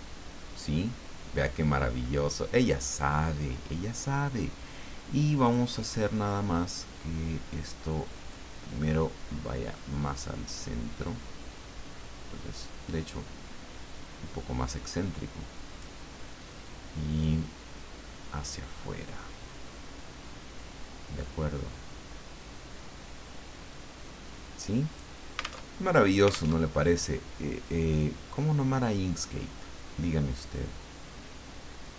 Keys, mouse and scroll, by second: 5.4 click, 8.3-16.2 drag, 17.2-25.2 drag, 25.7 alt+Tab, 26.5 alt+Tab, 28.0-31.9 drag.